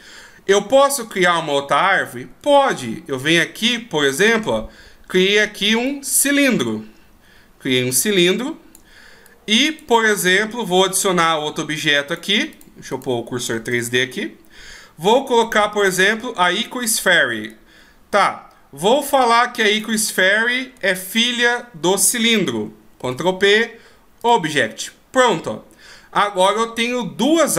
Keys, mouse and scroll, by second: 2.7 shift+a, 5.1-5.8 scroll down 2, 5.8 click, 6.9-8.3 scroll down 2, 7.3-8.3 scroll up 2, 8.3 click, 8.3-9.1 scroll up 1, 9.3 click, 10.8 shift+a, 12.9 click, 13.9 shift+a, 17.5 click, 21.1 shift+right click, 23.0 ctrl+p, 27.3 middle click.